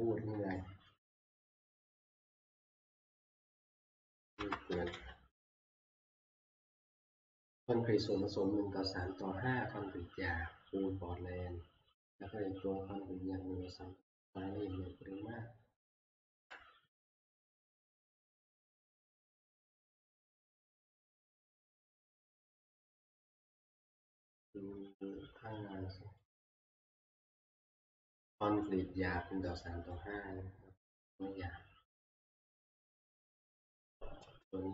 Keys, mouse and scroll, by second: 2.0-2.8 Left, 3.2 Left, 3.3 Left, 3.6 Left, 3.8 Left, 4.4 Left, 4.7 Delete, 4.9 Delete, 16.5 Return, 21.1 click, 22.3 click, 22.4 click, 26.2-31.4 drag, 32.4-34.4 drag.